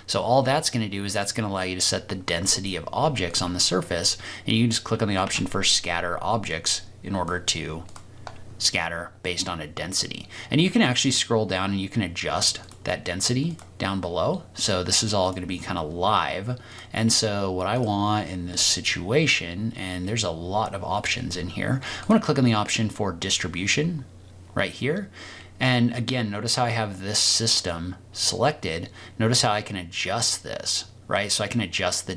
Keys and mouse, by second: 3.2 click, 5.3 ctrl+z, 7.9 click, 9.2-9.9 middle drag, 12.6 click, 15.2-15.8 drag, 16.7 click, 17.7 click, 22.0 click, 28.2-32.1 drag.